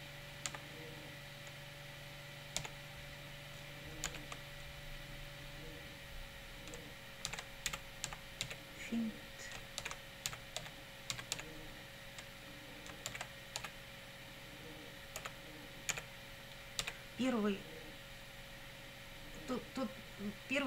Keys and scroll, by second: 0.0-0.5 typing, 2.6 t, 4.1 shift+;, 7.0-11.9 typing, 13.1 shift+c, 13.6 h, 15.2 i, 15.9 l, 16.8 d.